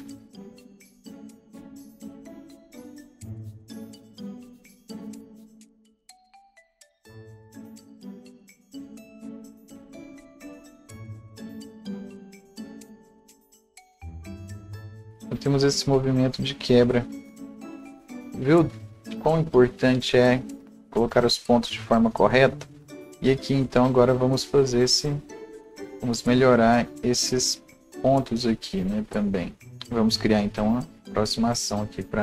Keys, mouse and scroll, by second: 0.5 scroll up 1, 0.7 alt+right click, 1.2 click, 1.7 scroll up 1, 1.9 click, 2.2 click, 2.6 ctrl+alt+z, 2.8-4.7 alt+drag, 3.2-4.5 right drag, 4.7-7.9 drag, 7.7 right click, 7.8 scroll down 1, 7.9 right click, 8.4 click, 9.0 scroll down 1, 9.1-10.1 right drag, 9.2 scroll up 1, 9.9-12.4 drag, 11.8 right click, 12.4-14.1 drag, 14.1 right click, 14.2-14.7 scroll down 1, 14.8 click, 15.1 ctrl+z, 15.1-29.7 alt+drag, 29.7-32.0 right drag, 29.7 scroll up 1, 32.0 click, 32.0-32.2 scroll up 1.